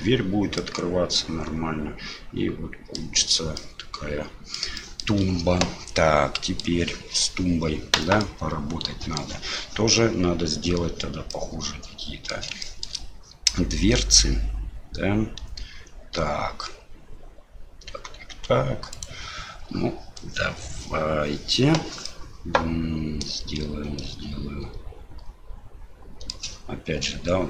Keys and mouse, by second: 0.7-3.0 middle drag, 3.7 middle click, 4.8 shift+middle click, 6.1 middle click, 8.2-9.2 middle drag, 11.3-12.3 middle drag, 12.7 shift+middle click, 19.0 right click, 22.0-26.3 middle drag.